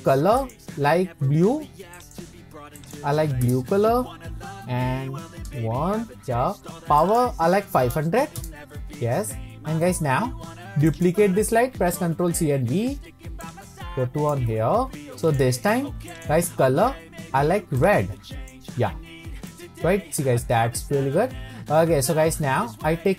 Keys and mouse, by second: 7.2-9.1 drag, 8.1 KP_0, 10.9 click, 12.4 ctrl+c, 12.8 ctrl+v, 13.4 click, 15.2 drag, 16.1 click, 19.5-22.1 middle drag.